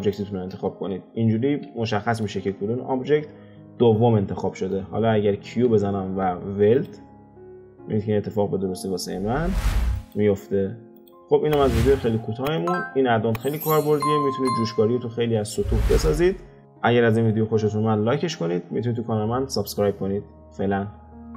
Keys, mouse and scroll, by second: 0.0 shift+click, 1.8-2.7 shift+middle drag, 2.7 scroll up 2, 4.5-4.9 shift+middle drag, 4.9-5.5 scroll down 1, 5.5 q, 11.3-12.2 scroll down 5, 12.6 click, 13.7-14.7 scroll up 3, 14.7-17.4 shift+middle drag.